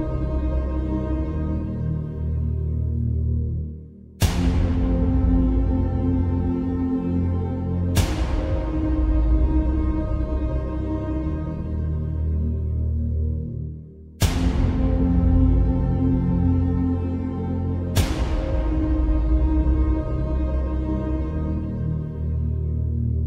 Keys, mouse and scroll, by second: 7.3 click, 10.2 ctrl+[, 12.2 click, 14.5 Left, 16.9-18.5 drag, 21.0-22.0 scroll down 1, 22.6 ctrl+g.